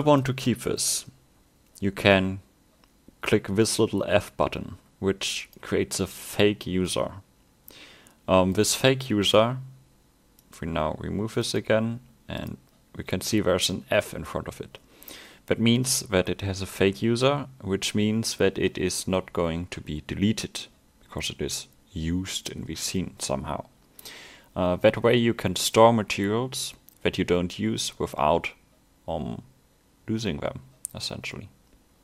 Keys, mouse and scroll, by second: 5.5 click, 6.7 middle click, 10.4 click, 12.4 click.